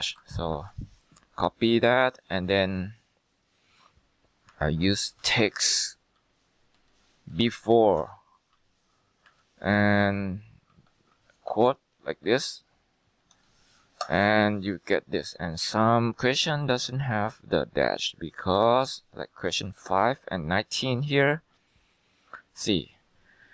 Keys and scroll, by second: 0.1 ctrl+c, 0.6 Escape, 4.6 Left, 4.9-7.4 typing, 8.1 Tab, 8.6 Down, 9.4 Left, 10.1-13.3 typing, 11.6 ctrl+v, 14.1 ctrl+Return.